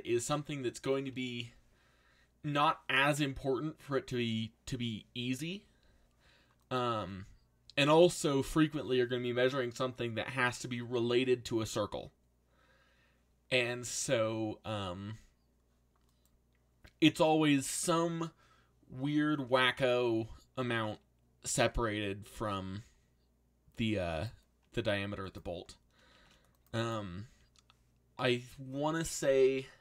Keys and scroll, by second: 21.5 shift+d, 25.5 3, 26.1 shift+'.